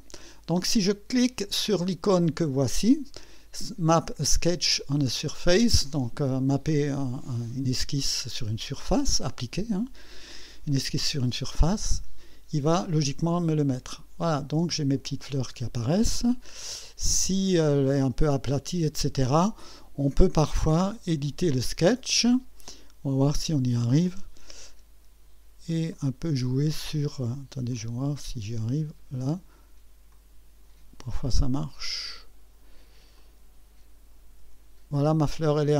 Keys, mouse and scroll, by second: 11.8 click, 13.6-15.2 drag, 15.6 scroll up 1, 16.1-17.3 drag, 19.7 click, 20.5 click, 22.2 scroll up 1, 22.7-23.4 right drag, 25.9-27.2 drag, 27.7-29.2 drag, 30.1-32.6 drag, 33.2 click, 35.1-35.7 drag.